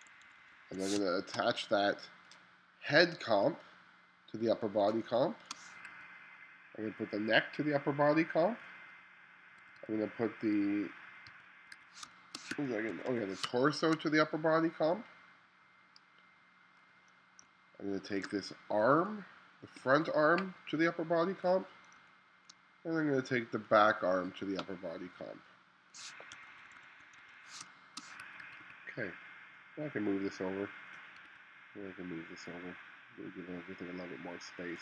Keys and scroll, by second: 0.1 1, 1.0 space, 5.1 space, 6.0 2, 9.6 2, 11.3-13.5 typing, 17.5 space, 22.0 space, 26.4 1, 27.7 space, 28.5 2, 31.3 2.